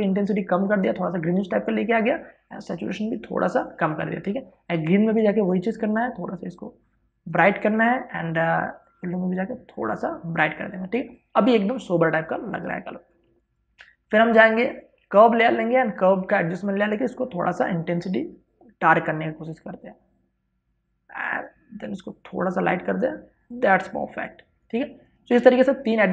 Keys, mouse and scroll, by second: 12.2 space, 12.4-25.2 ctrl+drag.